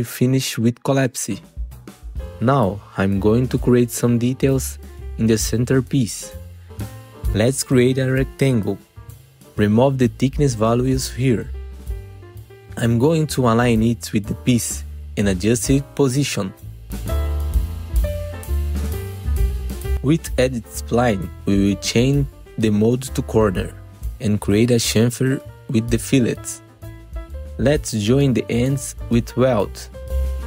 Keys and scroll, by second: 1.8 F4, 2.4 F4, 3.5 alt+q, 3.9 F4, 4.6 w, 7.1 F4, 12.0 w, 14.6 F3, 16.1 F3, 18.6 F4, 21.1 1, 30.3 2.